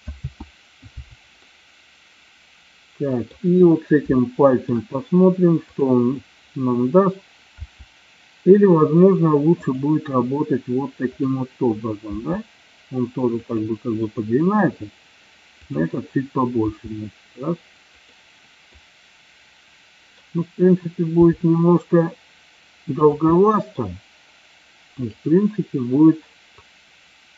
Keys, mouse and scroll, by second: 0.3 ctrl+z, 1.7-3.7 middle drag, 4.3 shift+middle click, 5.7 click, 7.6 r, 12.1 r, 13.5 click, 16.7 r, 18.0 click, 18.8-20.2 middle drag, 21.2 r, 23.1 click, 23.4-23.7 middle drag, 25.1 click, 26.7 click.